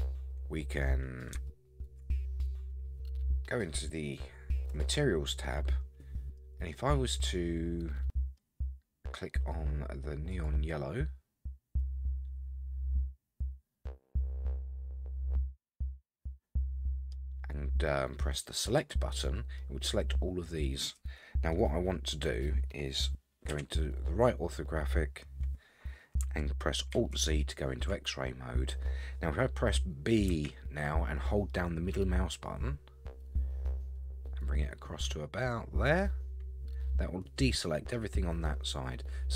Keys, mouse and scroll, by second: 1.5 shift+middle click, 4.7 click, 5.4 middle click, 6.7-8.4 middle drag, 10.3 click, 11.3-11.8 scroll down 3, 11.8-17.1 middle drag, 18.8 click, 19.6-20.9 middle drag, 23.5 KP_3, 24.5-26.2 scroll up 3, 26.9 alt+z, 29.8-30.3 scroll down 3, 30.3 b, 38.7-39.3 middle drag.